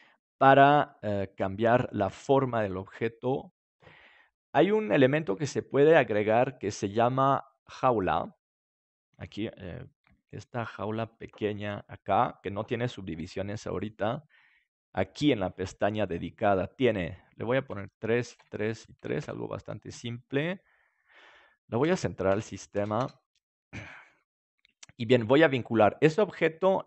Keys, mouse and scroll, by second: 5.0-7.4 drag, 5.9-8.6 middle drag, 8.0-9.9 drag, 10.1 s, 12.1-15.4 drag, 13.1 g, 16.0-20.6 drag, 21.6-24.5 drag, 25.8-26.8 right drag.